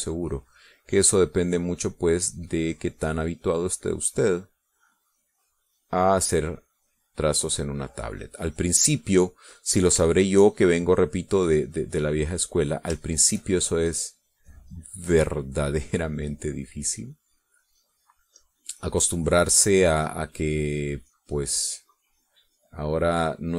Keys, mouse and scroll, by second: 0.6-6.9 drag, 7.7-9.9 drag, 11.1 shift+click, 11.9-13.6 drag, 14.1 shift+click, 14.9-18.3 shift+drag, 18.6-22.3 drag, 22.8-23.5 drag.